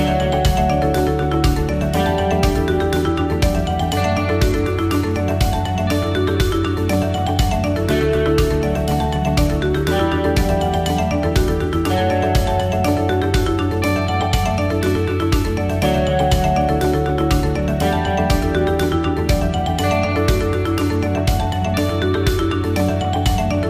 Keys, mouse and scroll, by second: 1.2 middle click, 1.8-2.2 scroll up 1, 2.3 shift+middle click, 3.6 scroll down 1, 6.2 shift+middle click, 7.7 KP_7, 8.7-9.2 scroll down 2, 9.2 shift+middle click, 10.7 shift+middle click, 12.7 middle click, 15.6 middle click, 16.3 shift+middle click, 17.1-17.8 scroll up 2, 17.5 middle click, 18.5-18.8 scroll up 2, 19.1 shift+middle click, 19.8 scroll up 1.